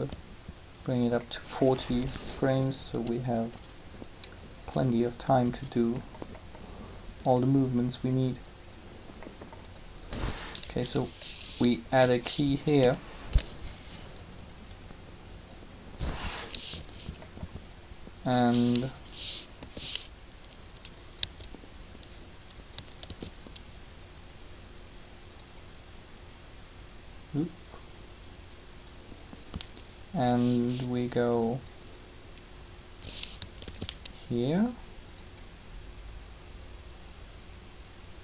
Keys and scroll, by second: 2.1 Up, 7.0 Up, 12.5 i, 19.6 g, 23.1 shift+d, 33.6 shift+d.